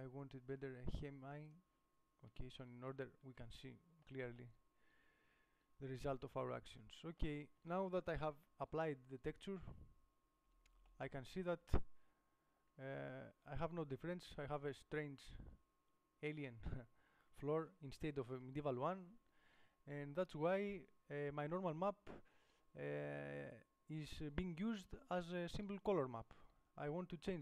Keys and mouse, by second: 6.8-7.9 middle drag, 8.6 KP_7, 15.3-17.1 middle drag, 18.0-19.1 middle drag, 19.1 KP_7.